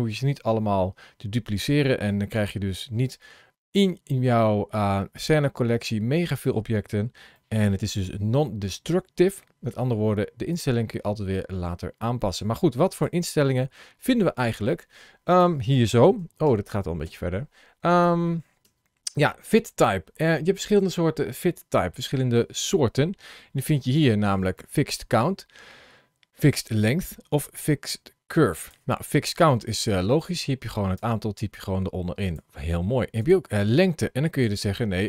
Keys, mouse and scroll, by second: 7.1 shift+middle click, 10.4 click, 24.2 click, 29.3 click, 32.0 click, 34.2 click.